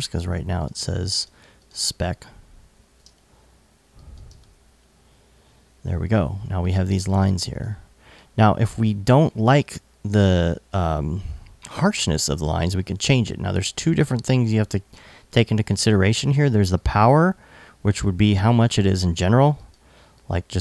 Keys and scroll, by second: 2.2 super+a, 2.3 super+c, 2.6 super+Tab, 3.8 super+v, 4.0 super+Tab, 4.9 Tab, 7.0 alt+|.